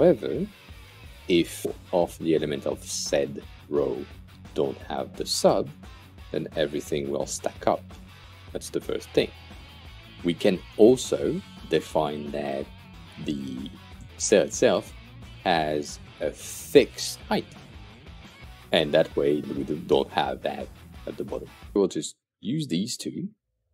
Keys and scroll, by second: 5.3 Delete.